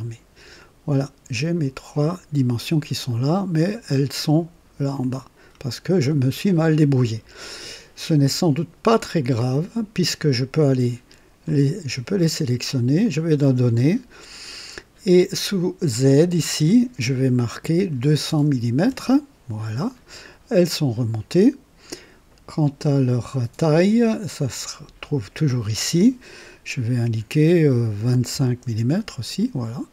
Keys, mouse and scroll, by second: 0.6 click, 2.1-4.9 drag, 5.0-6.5 drag, 9.0 click, 11.5 shift+click, 13.0 click, 16.3 click, 17.9 KP_2, 18.2 KP_0, 18.4 KP_0, 18.9 KP_0, 20.7-22.1 drag, 23.3 click, 25.0 click, 28.0-29.4 typing.